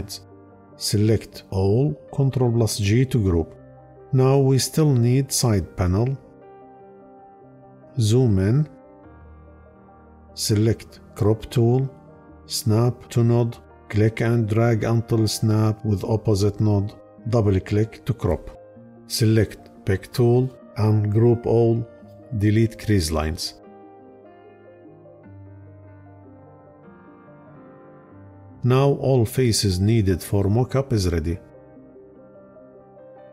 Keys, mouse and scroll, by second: 2.2 ctrl+g, 21.8 Delete, 23.5 Delete, 24.4 Delete, 25.8 Delete.